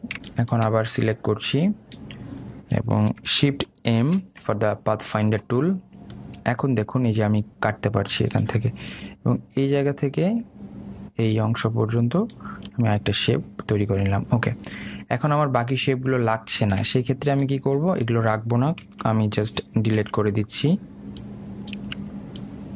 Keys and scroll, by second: 19.9 Delete.